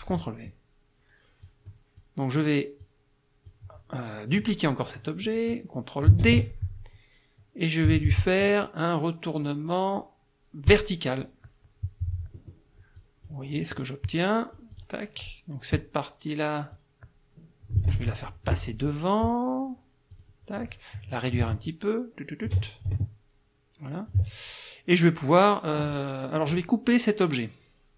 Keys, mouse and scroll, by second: 1.4 click, 2.8 click, 6.2 ctrl+d, 10.7 click, 12.4 middle click, 13.0 click, 13.8-15.0 drag, 15.2 click, 16.8-18.0 drag, 18.0 ctrl+z, 20.1 click, 21.7-22.7 ctrl+shift+drag, 22.9-24.3 ctrl+shift+drag, 25.8 click, 26.5 click.